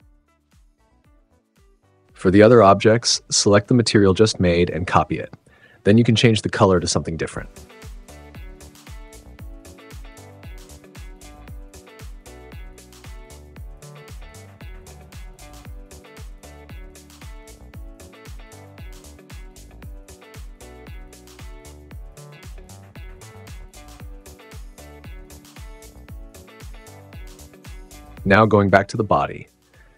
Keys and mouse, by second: 2.3 click, 4.4 click, 5.6 click, 5.9 shift+right click, 7.4 right click, 13.5 shift+right click, 13.8 right click, 14.2 shift+click, 14.6-15.2 drag, 16.6 drag, 17.1 right click, 18.1 right drag, 19.3 right click, 20.4 right click, 23.8 super+s, 24.8 click, 25.8 click, 26.1 shift+click, 26.2 shift+right click, 26.7 BackSpace, 27.6 super+z, 27.7 super+z, 27.8 super+z, 27.9 super+z, 28.0 super+z, 29.5 right click.